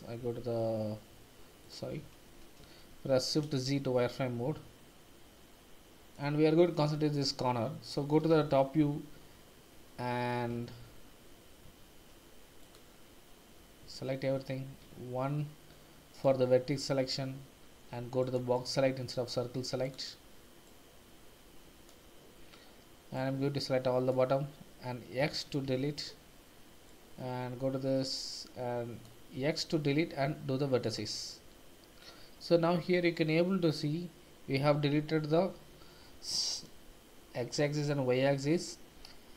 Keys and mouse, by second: 2.9 shift+z, 4.2-6.0 middle drag, 6.0 click, 8.3 KP_7, 10.7 shift+z, 11.7 shift+z, 12.6 click, 13.8 a, 14.8 1, 16.1 click, 18.2 click, 18.6-19.9 drag, 20.8-22.0 drag, 23.3 click, 25.2 x, 27.1-29.0 drag, 29.3 x.